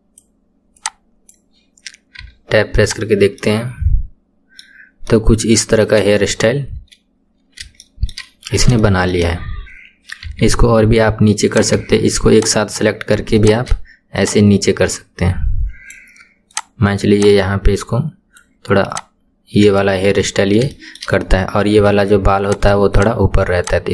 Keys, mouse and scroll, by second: 0.8 click, 2.2 Tab, 2.4-2.8 scroll down 5, 2.8 click, 3.4-6.0 middle drag, 6.0 KP_1, 6.3-6.8 scroll up 4, 7.2-7.8 scroll down 3, 7.8-8.4 shift+middle drag, 8.4-8.8 scroll up 3, 8.8-10.3 shift+middle drag, 10.3 Tab, 11.5 click, 12.4 shift+click, 13.4 shift+click, 14.2 click, 16.6 click, 17.2 click, 18.9 click, 19.3-19.8 scroll down 2, 19.8 shift+middle click, 20.3-20.7 scroll up 2, 20.7-22.5 shift+middle drag, 22.5 click, 23.0 shift+click, 23.6 shift+click.